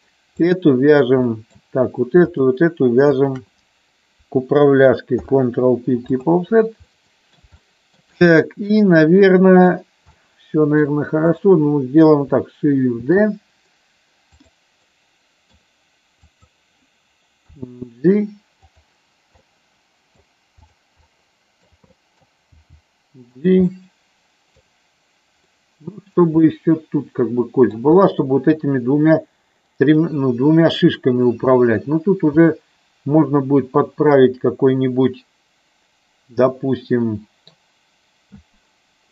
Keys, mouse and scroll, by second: 1.4 middle click, 2.3 shift+click, 3.1 shift+click, 5.1 ctrl+p, 6.8 middle click, 7.6 shift+middle click, 8.5-9.6 middle drag, 10.1 middle click, 13.1 shift+d, 14.3 click, 14.8 middle click, 16.4 click, 17.6 g, 18.7 click, 19.4 middle click, 20.6 click, 21.1 middle click, 21.8 middle click, 22.5 g, 23.3 click, 23.7 middle click, 25.6 middle click, 26.4-27.7 middle drag, 28.1 middle click, 32.4-37.6 middle drag.